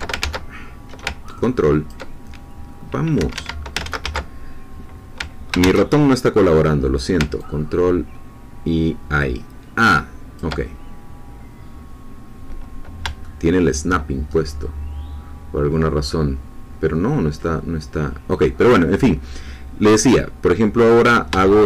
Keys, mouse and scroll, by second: 0.2 ctrl+z, 1.3 ctrl+click, 3.1 Escape, 3.8 ctrl+z, 5.6 ctrl+shift+z, 7.3-10.9 ctrl+drag, 12.0-12.6 scroll down 2, 13.2 shift+middle click, 14.3-15.2 shift+scroll up 4, 21.5-21.6 shift+middle drag.